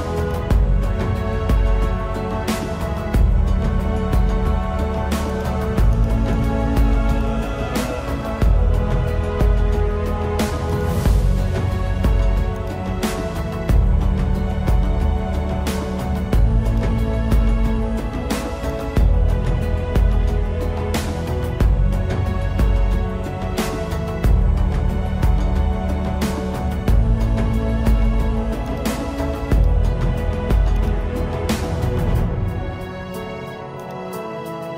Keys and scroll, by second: 3.5 ctrl+-, 6.3 ctrl+-, 10.0 space, 13.1 ctrl+=, 20.7 ctrl+-, 23.6 space, 25.7 ctrl+alt+z, 26.5 space, 27.8 space, 29.5 space, 30.4 ctrl+alt+z.